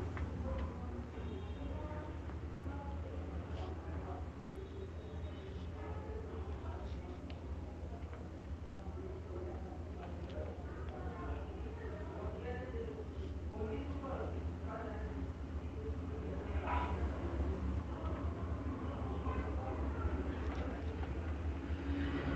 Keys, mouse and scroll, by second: 0.2 click, 2.8 alt+click, 3.3 click, 4.1 alt+click, 7.6 click, 10.2-13.5 shift+click, 10.6-12.0 typing, 13.3 click, 14.1 click, 15.3 alt+click, 15.8-16.4 alt+click, 16.2 alt+click, 16.6 alt+click, 17.0 alt+click, 17.4 alt+click, 18.0 alt+click, 20.5 shift+click, 21.8 alt+click.